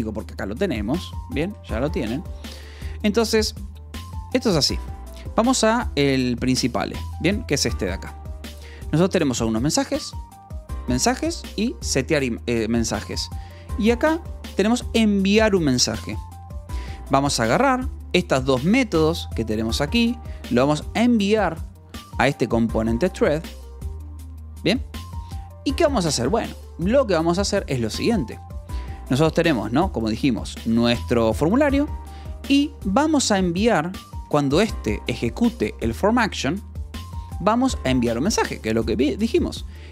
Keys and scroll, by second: 2.0 Escape, 2.6 j, 3.7-5.2 typing, 6.4 k, 6.7 j, 9.4 j, 13.0 Escape, 13.2 j, 13.8 j, 16.8 Escape, 17.9 shift+v, 18.3 Escape, 18.5 k, 19.6 Escape, 19.8 j, 20.9 shift+v, 22.0 Escape, 22.2-24.4 typing, 25.5 j, 30.4-32.4 typing, 33.9-36.1 typing, 34.2 Escape, 36.9 Escape.